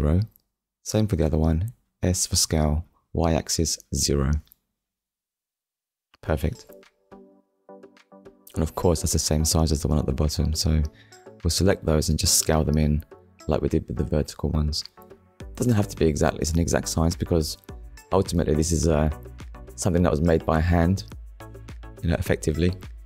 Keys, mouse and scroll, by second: 1.1 alt+click, 3.1 0, 3.9 Return, 4.9 middle click, 6.7 KP_7, 7.8 scroll up 1, 8.3 scroll down 1, 9.0 middle click, 12.1 alt+shift+click, 12.7 middle click, 18.6 click, 18.9 middle click, 22.9 click.